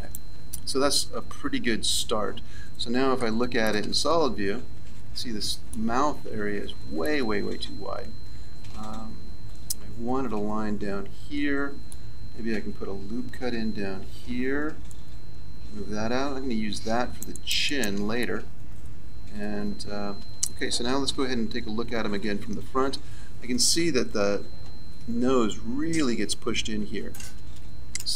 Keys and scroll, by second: 3.1 z, 14.3 ctrl+r, 21.6 KP_1, 22.0 z, 27.9 a.